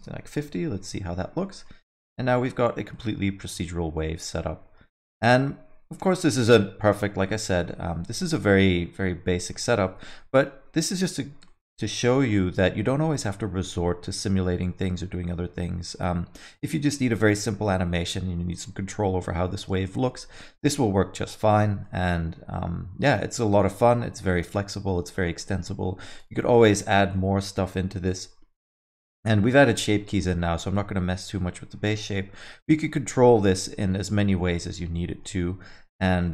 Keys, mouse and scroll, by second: 0.5 space, 1.4 alt+middle click, 2.2 scroll down 2, 2.5 alt+middle click, 2.9 scroll up 1, 3.0 middle click, 4.4 alt+middle click, 6.0 alt+middle click, 6.9 alt+middle click, 7.3 middle click, 9.3 alt+middle click, 9.9 alt+shift+z, 10.2 middle click, 10.6 scroll down 1, 11.0 alt+middle click, 11.6 middle click, 11.9 scroll down 1, 12.2 alt+middle click, 16.9 middle click, 17.6 scroll up 1, 17.8 middle click, 20.0 alt+shift+z, 20.5 middle click, 21.9 alt+middle click, 24.1 alt+shift+z, 24.9 space, 25.2 alt+middle click, 25.6-26.2 scroll up 3, 26.2 click, 26.5 alt+middle click, 26.9 middle click, 28.0 shift+Left, 28.9 middle click, 29.2 scroll down 3, 29.5 middle click, 29.5-30.0 alt+scroll up 3, 29.7 middle click, 30.1 alt+middle click, 30.4 middle click, 31.0 middle click, 31.4 alt+middle click, 32.3 scroll up 2, 32.5 alt+middle click, 33.2 scroll up 1, 33.3 scroll down 3, 33.6 alt+middle click, 33.9 middle click, 34.1 scroll down 1, 34.4 alt+middle click, 35.4 middle click, 35.7 scroll down 1, 36.0 alt+middle click.